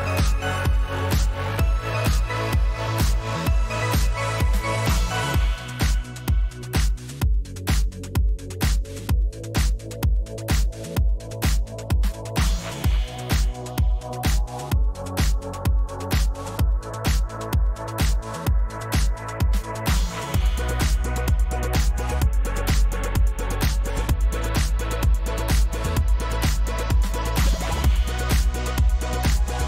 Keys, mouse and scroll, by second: 0.0-1.1 typing, 1.4 ctrl+a, 3.0-5.1 drag, 7.2 click, 9.0 click, 9.5 click, 10.0 ctrl+a, 19.3 click, 22.3 click, 23.1 click, 24.3 click, 25.7 shift+click, 26.3 click, 27.2 click, 28.3-28.9 Right, 29.2 Right, 29.3 Right, 29.6 Right.